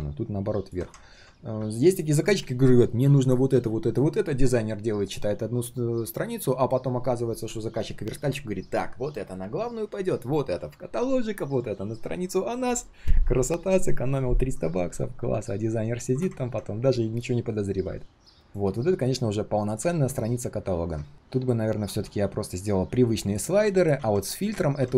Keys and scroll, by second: 19.8 ctrl+z, 23.9 ctrl+z, 24.6 ctrl+z.